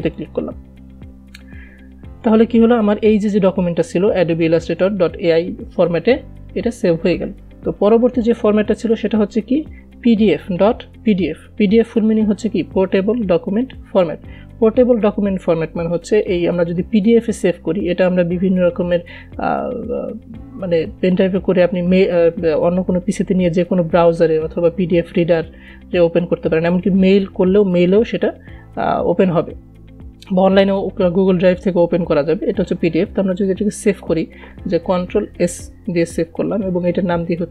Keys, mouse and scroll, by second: 0.6 click, 8.5 click, 16.6 click, 34.9 ctrl+Num_Lock, 35.7 ctrl+s.